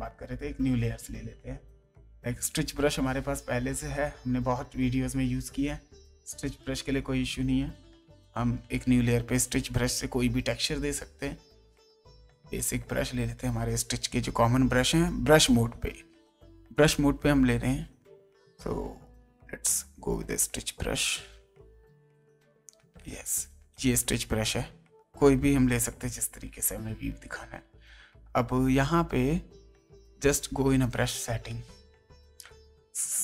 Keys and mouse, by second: 0.5 click, 1.8 click, 3.8 click, 5.1 click, 6.2 click, 7.7 click, 9.7 click, 11.0 click, 12.7 click, 18.4 click, 20.3 click, 21.6 click, 24.2 click, 26.1 space, 27.6 ctrl+space, 28.2 space, 30.0 click.